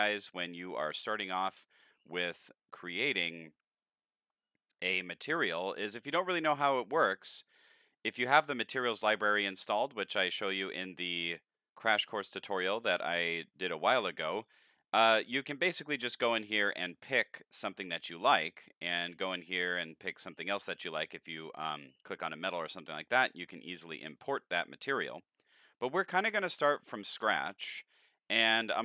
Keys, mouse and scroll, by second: 0.0 click, 1.2 click, 2.4-3.8 drag, 15.6 click, 18.1 click, 18.6 click, 21.1 click, 23.6 scroll up 1, 28.3 click.